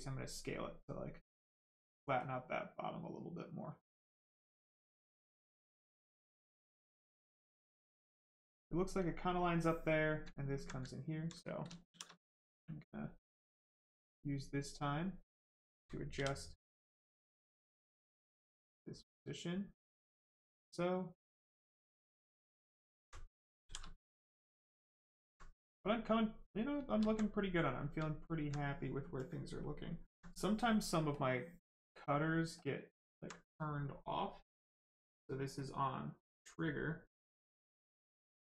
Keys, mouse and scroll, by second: 1.4 click, 4.5 click, 10.9 alt+right click, 11.9 shift+f, 13.3 ctrl+click, 16.1 w, 18.0 alt+click, 18.8 click, 22.5 ctrl+click, 23.0 alt+right click, 23.5 shift+right click, 23.6 shift+f, 24.0 right click, 25.2 alt+right click, 25.8 right click, 27.0 alt+right click, 28.0 alt+right click, 28.2 alt+click, 29.6 alt+click, 31.1 click, 31.8 alt+click, 32.6 alt+click, 37.6 click.